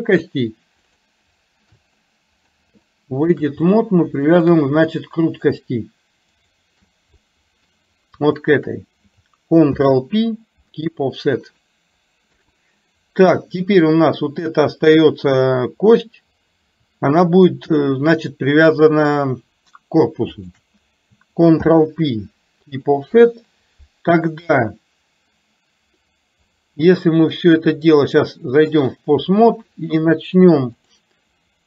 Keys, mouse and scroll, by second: 0.9 shift+click, 2.1 middle click, 3.0 shift+middle click, 5.0 middle click, 6.5 shift+click, 7.4 middle click, 8.5 shift+click, 10.0 ctrl+p, 12.5 KP_3, 13.9 click, 27.2-28.9 drag, 31.0 click.